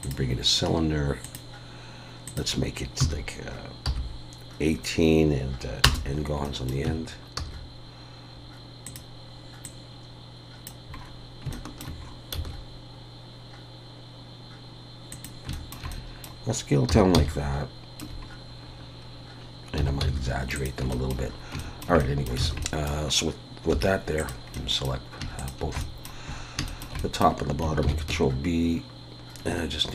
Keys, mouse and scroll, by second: 1.4 click, 6.4 middle click, 6.9 Tab, 7.4 s, 9.6 click, 11.0-11.5 scroll up 4, 11.5 shift+middle click, 12.0 scroll up 1, 12.3 s, 15.5 shift+middle click, 15.9 middle click, 16.9 s, 18.3 scroll up 6, 19.0 scroll down 1, 19.8 s, 20.9 shift+middle click, 21.3 scroll up 2, 21.6 shift+middle click, 22.0 middle click, 22.4 alt+a, 22.6 middle click, 23.7 3, 24.2 click, 24.5 middle click, 25.4 shift+click, 25.8 middle click, 26.3-26.7 scroll up 3, 26.7 shift+middle click, 27.0 middle click, 27.8 ctrl+b.